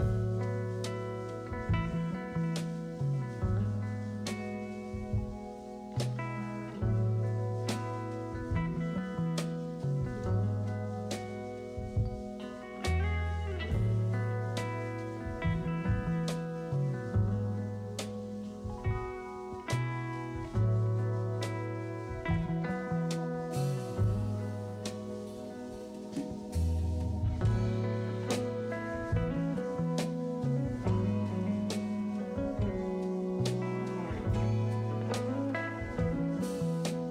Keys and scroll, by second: 1.8 1, 6.0-6.9 typing, 8.0 s, 16.6 s, 25.8 s, 28.3 s.